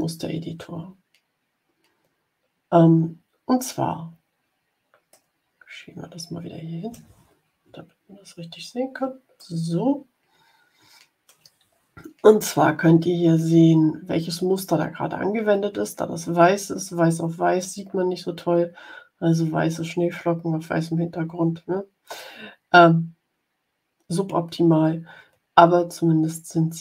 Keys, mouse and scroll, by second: 5.0 click, 5.1-7.0 middle drag, 7.6-8.0 ctrl+scroll up 2, 8.5 ctrl+scroll up 2, 9.3-10.4 middle drag, 10.4 click.